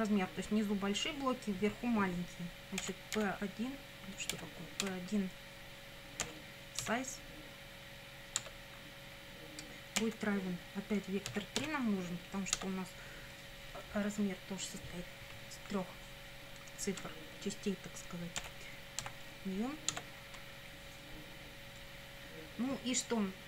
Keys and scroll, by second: 2.8 p, 3.1 i, 4.3 BackSpace, 4.8 1, 6.2 ., 6.8 s, 8.4 Tab, 10.0 =, 11.3 v, 11.6 e, 12.6 Tab, 18.4 ., 19.0 n, 19.9 Tab.